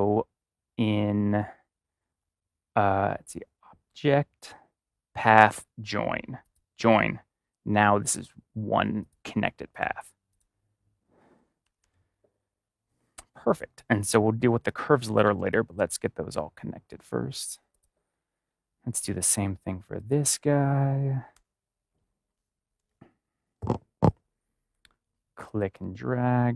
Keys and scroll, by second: 11.3 ctrl+=, 11.6 ctrl+-, 14.5-15.3 typing, 21.3 typing.